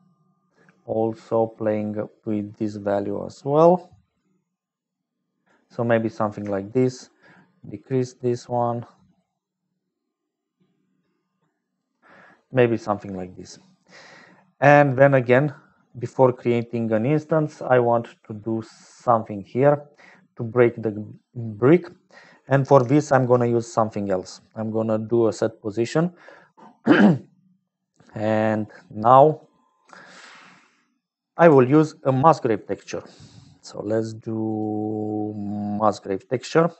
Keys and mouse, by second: 0.0-36.7 typing, 3.0-5.4 drag, 7.2-11.8 shift+drag, 14.2 click, 16.4 click, 21.9 middle click, 22.4 middle click, 28.7 click, 29.3 click, 29.9 click, 31.0 click.